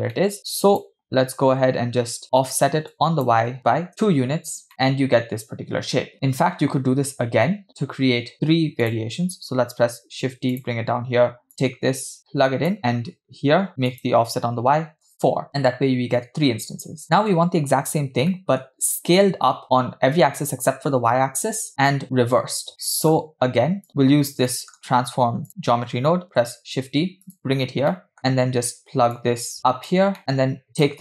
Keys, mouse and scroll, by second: 0.2 middle click, 0.4 click, 1.1-1.6 scroll up 3, 2.0 scroll up 2, 2.9 click, 4.7 middle click, 4.7 scroll down 2, 6.1-6.9 scroll down 2, 8.3-8.8 scroll down 2, 8.8 scroll down 2, 8.9 click, 9.8 shift+d, 11.5 click, 12.2 click, 12.8 middle click, 12.9-13.6 scroll up 4, 13.9-15.1 drag, 18.0-18.3 scroll down 2, 18.3-18.6 middle drag, 22.8 middle click, 23.2-23.8 scroll down 1, 23.9 click, 23.9 scroll down 2, 24.5 scroll down 2, 24.5-24.9 middle drag, 25.5 click, 26.3 shift+d, 27.6-28.7 scroll up 3, 27.9 middle click, 29.1-29.9 drag, 30.2 middle click, 30.8 click.